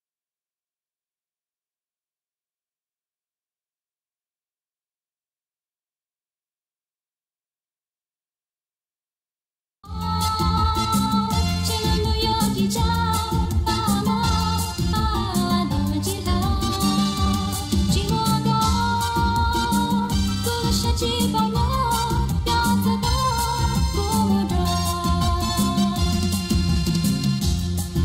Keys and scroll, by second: 9.8 space.